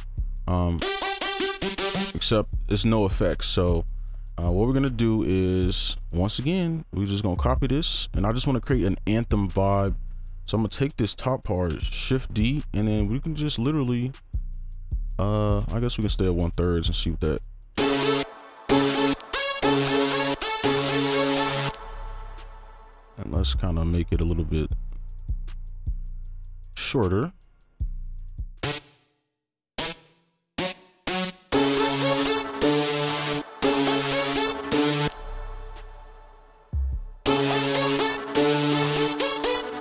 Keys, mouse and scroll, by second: 0.7-3.0 typing, 3.0 right click, 6.5 right click, 8.6 double click, 9.6-9.9 scroll down 1, 9.9-10.3 scroll up 1, 10.3 ctrl+click, 12.2 d, 12.4 right click, 13.8 ctrl+2, 15.3 ctrl+3, 15.4 ctrl+click, 15.7 shift+click, 16.0 shift+right click, 16.4 ctrl+click, 16.7 shift+click, 17.4 right click, 18.2-20.6 typing, 21.5 scroll down 1, 22.5 alt+click, 23.7 ctrl+right click, 27.2 alt+click, 29.1 right click, 31.0 double click, 31.3 right click, 32.2 space, 33.4 space, 33.6 space, 34.6 space, 34.8 ctrl+click, 35.6 shift+click, 36.7 shift+right click, 36.7 click, 37.4 space, 37.8 ctrl+click.